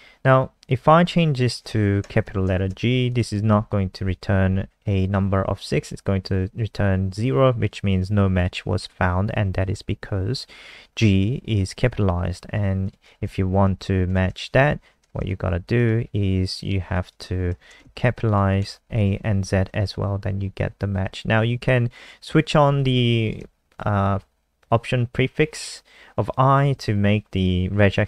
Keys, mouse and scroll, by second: 1.9 Right, 2.2 BackSpace, 2.5 g, 3.1 click, 3.3 ctrl+s, 3.7 F5, 11.7 click, 13.6 Left, 13.7 Left, 14.1 BackSpace, 14.3 a, 14.5 Right, 15.7 click, 17.5 BackSpace, 17.7 z, 18.3 click, 18.6 ctrl+s, 19.4 F5, 22.7 click.